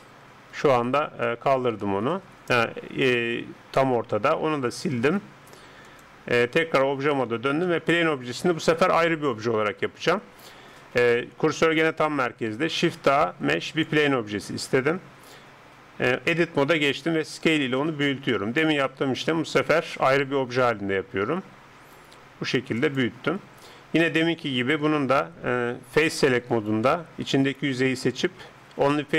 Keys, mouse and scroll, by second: 3.3-6.0 middle drag, 4.6 x, 7.0 Tab, 7.3 middle click, 7.6-10.2 drag, 12.6 shift+a, 16.3 Tab, 17.1 s, 26.0-28.4 drag, 26.6-29.1 right drag, 28.4 x.